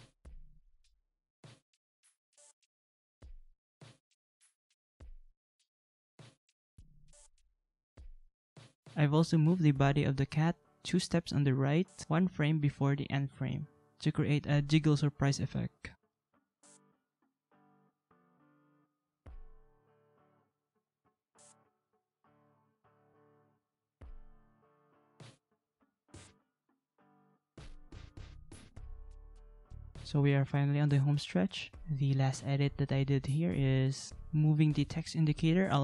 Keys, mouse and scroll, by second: 24.6 ctrl+=, 24.7 ctrl+=, 25.6 ctrl+[, 25.7 ctrl+[, 26.0-26.4 ctrl+[, 32.5 ctrl+c, 33.4 ctrl+v, 35.5 ctrl+z.